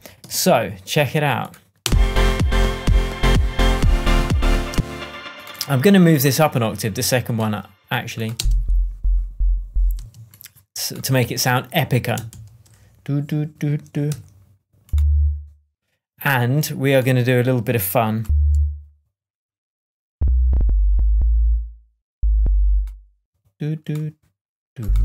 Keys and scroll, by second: 0.2 shift+super+Tab, 0.7 shift+Tab, 1.8 space, 4.6 space, 8.3 space, 9.9 space, 12.2 shift+Up, 14.0 p.